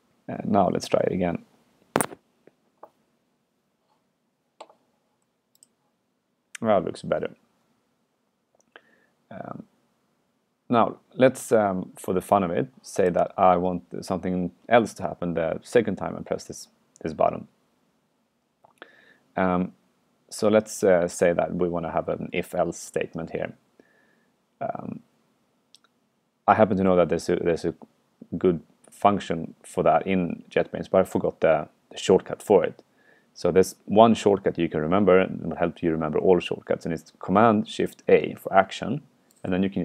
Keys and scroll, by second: 11.7 super+q, 14.4 super+Left, 15.0 super+Left, 38.1 shift+super+a.